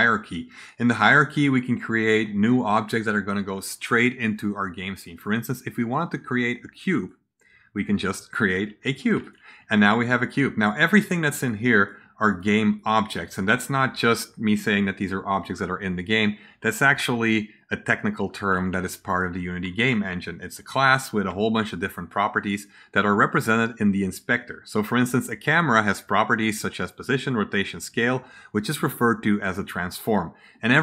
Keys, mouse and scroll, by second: 0.5 click, 4.8 click, 6.8 click, 9.1 click, 9.8 click, 11.3 click, 11.7 click, 12.2 click, 12.7 click, 13.1 click, 19.3-22.0 right drag, 19.5 s, 19.8 a, 20.6 a, 21.0 s.